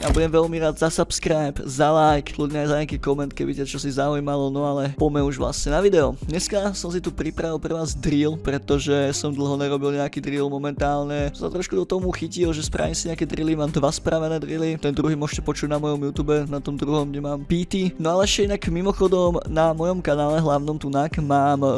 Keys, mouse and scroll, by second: 7.0 ctrl+scroll down 2, 9.3 scroll up 2, 9.8 ctrl+middle click, 10.4-11.9 scroll up 2, 12.1 ctrl+scroll up 2, 12.4 ctrl+scroll down 2, 17.9 ctrl+scroll up 2.